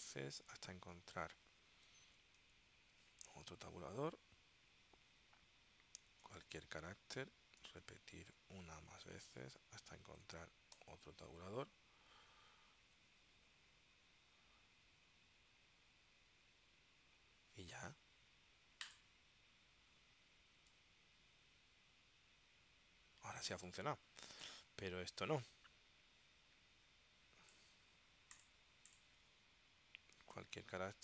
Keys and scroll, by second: 2.0 alt+o, 3.7 t, 6.4 ., 10.2 alt+0, 10.9 t.